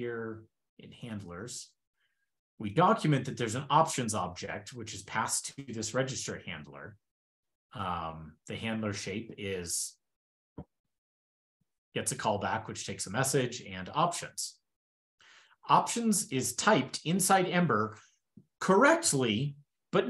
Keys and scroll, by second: 0.5 shift+super+], 16.5 super+Left, 16.7 shift+super+Right.